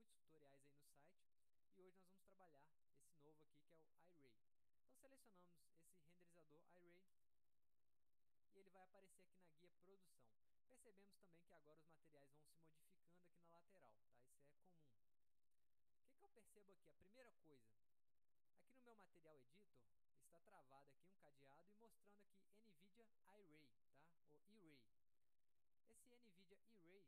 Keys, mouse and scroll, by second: 2.8 click, 7.1 click.